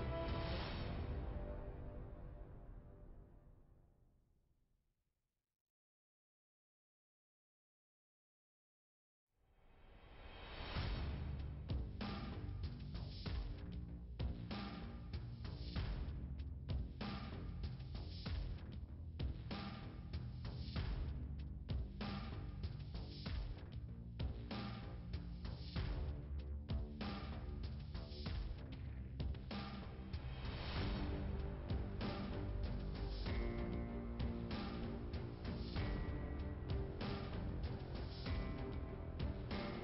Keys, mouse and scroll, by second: 0.9 click, 1.9 click, 2.9 click, 4.3 scroll down 1, 6.5 click, 7.3 click, 7.9 click, 9.2 click, 9.8 click, 10.9 click, 11.7 click, 12.5 click, 14.4 click, 15.1 click, 16.1 click, 16.6 click, 16.7 click, 17.1 click, 18.5 click, 19.9 click, 20.8 click, 21.5 click, 23.1 click, 25.3 click, 27.1 click, 27.4 click, 27.5 double click, 28.1 double click, 29.0 click, 29.7 click, 30.4 click, 31.5 click, 32.4 click, 34.6 click, 36.1 click, 36.9 click, 37.6 click.